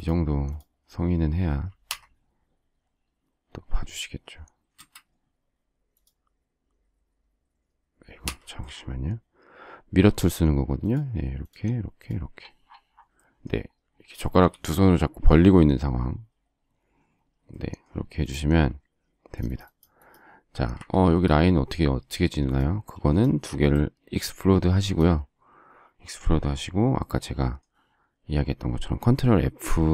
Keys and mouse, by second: 1.8 Escape, 8.2 Escape, 20.8 Escape.